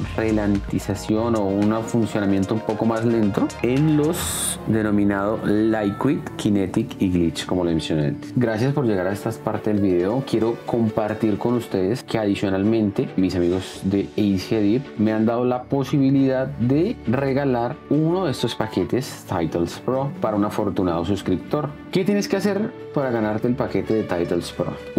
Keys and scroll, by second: 1.3 space.